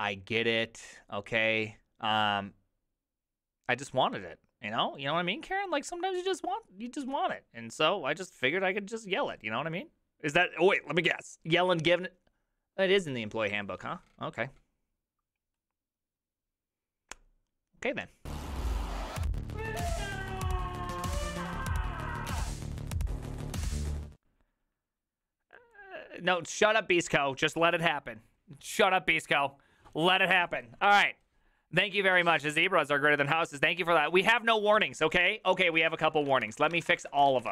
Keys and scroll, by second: 35.7-37.5 typing.